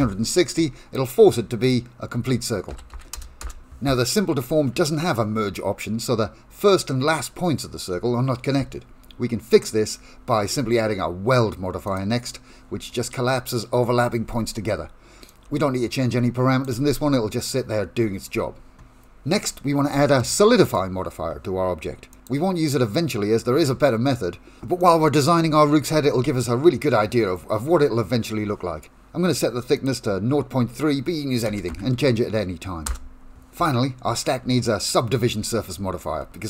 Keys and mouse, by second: 1.7-3.7 drag, 4.0 shift+middle click, 4.8 shift+middle click, 5.2 middle click, 9.5-12.0 drag, 15.3-16.7 drag, 20.2 middle click, 22.2-24.9 drag, 29.8-33.3 drag, 34.1 shift+middle click, 34.5 middle click, 35.5 shift+middle click, 35.8 middle click.